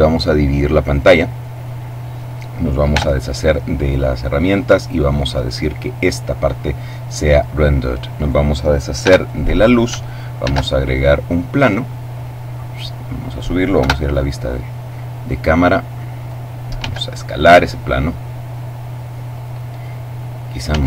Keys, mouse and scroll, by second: 1.1-2.7 drag, 2.9 t, 4.6 click, 5.4 click, 8.2 right click, 9.0 x, 9.3 click, 10.4 shift+a, 11.3 click, 12.2-13.9 drag, 13.8 KP_0, 15.1-16.7 drag, 16.8 s, 18.0 click, 20.7 s.